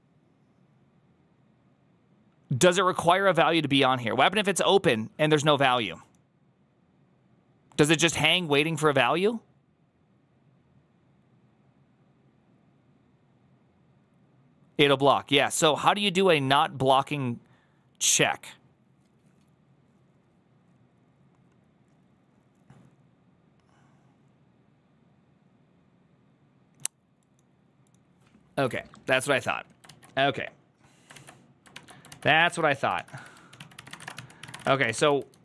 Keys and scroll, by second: 31.0 alt+{, 31.0 alt+[, 31.6 alt++, 32.0 alt+{, 32.4 ctrl+h, 32.8 ctrl+w, 33.0-35.4 typing, 33.4 ctrl+w, 33.4 ctrl+o.